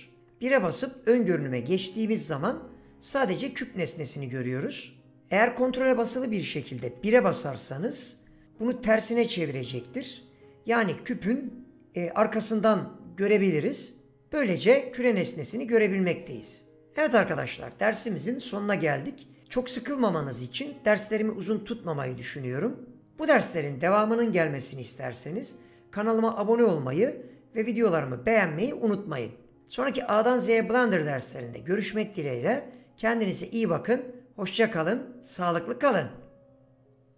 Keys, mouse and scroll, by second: 0.8 KP_1, 7.0 ctrl+KP_1.